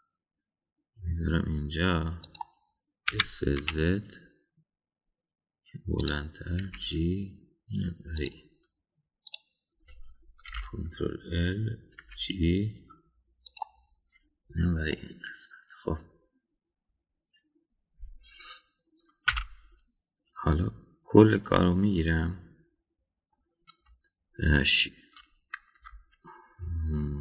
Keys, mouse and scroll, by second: 4.1 s, 7.6 g, 10.2 click, 11.5 ctrl+l, 13.0 g, 15.9-18.1 middle drag, 20.3 a, 22.4-24.3 middle drag, 26.7 Tab.